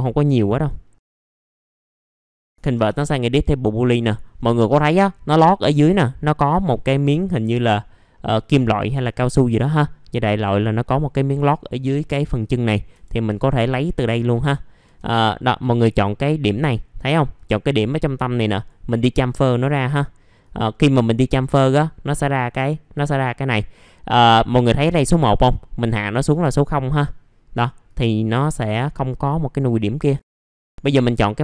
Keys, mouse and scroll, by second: 0.3 click, 1.1 click, 2.0 middle click, 3.8 middle click, 4.6-7.2 scroll up 1, 7.2-8.1 scroll down 1, 8.1 middle click, 8.6-10.4 scroll up 1, 10.4 middle click, 10.6-11.8 scroll down 1, 12.4 scroll up 1, 12.9 F4, 13.3-13.6 scroll up 1, 13.6 middle click, 14.6 scroll up 1, 17.3 right click, 18.5-30.2 drag, 30.2 middle click, 30.5 click, 31.0 right click.